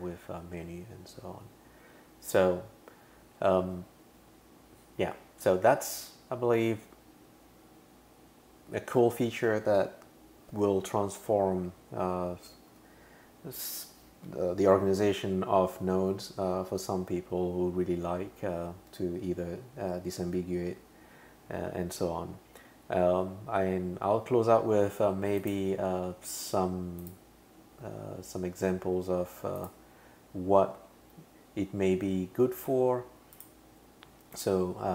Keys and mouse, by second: 25.4 click, 27.0 click, 33.4 click, 34.4 click.